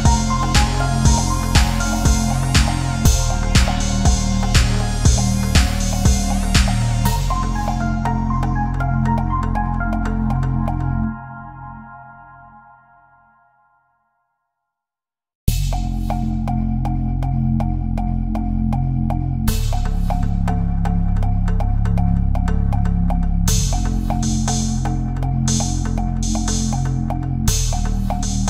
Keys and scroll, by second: 15.8 ctrl+z.